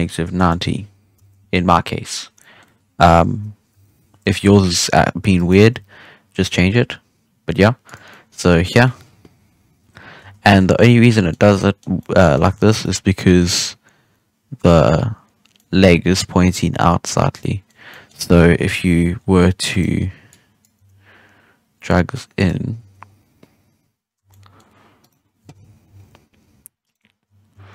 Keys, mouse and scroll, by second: 2.3 scroll down 1, 2.3-3.7 middle drag, 3.7 KP_1, 4.3 middle drag, 4.6-5.3 scroll down 1, 5.3 right click, 5.5 g, 8.0 scroll down 1, 8.0-9.3 middle drag, 9.3 KP_1, 9.9 scroll up 1, 10.1 Tab, 10.5 a, 10.7-11.3 middle drag, 11.3 scroll down 2, 11.5-11.9 middle drag, 11.9 scroll up 1, 11.9-12.5 middle drag, 12.5 alt+a, 12.7-17.6 middle drag, 17.6 scroll down 2, 17.8-18.5 middle drag, 18.5 KP_1, 19.1-19.7 scroll up 5, 19.7 right click, 20.2-20.7 drag, 20.7 g, 22.7 Tab, 22.9-23.7 scroll down 1, 23.7-24.1 scroll down 2, 24.1 a, 24.2-24.9 middle drag, 24.9 right click, 25.8 alt+g, 26.8 right click, 27.5 alt+g.